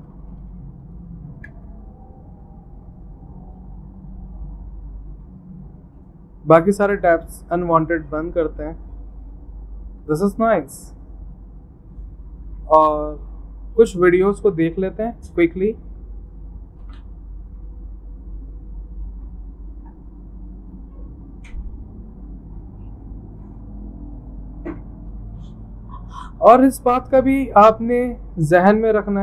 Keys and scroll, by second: 0.0-1.2 typing, 1.9 Return.